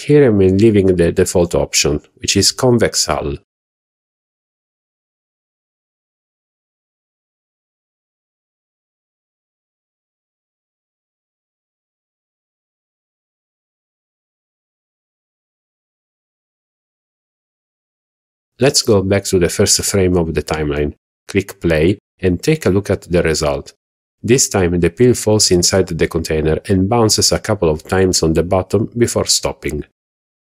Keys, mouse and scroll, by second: 10.6-12.8 drag, 18.1 click, 18.8 scroll down 2, 19.2-19.6 middle drag, 20.7 KP_1, 21.8-22.3 shift+middle drag, 22.4 scroll down 1, 23.0 scroll up 1, 24.5 click, 27.8 click.